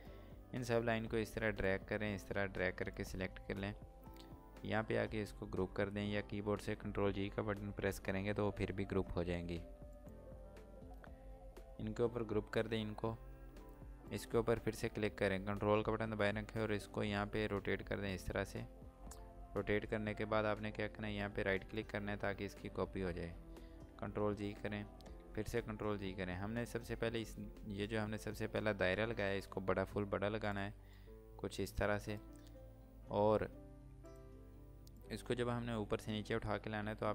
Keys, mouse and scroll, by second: 9.8 click, 13.8 click, 16.9 click, 21.5 ctrl+right click, 30.2 click.